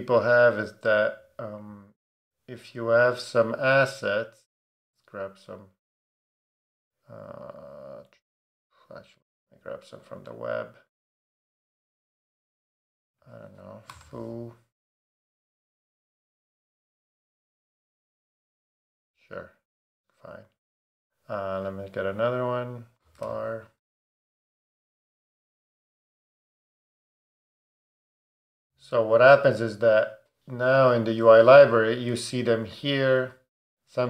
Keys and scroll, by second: 13.6-14.5 typing, 22.7-23.7 typing, 24.1 Return.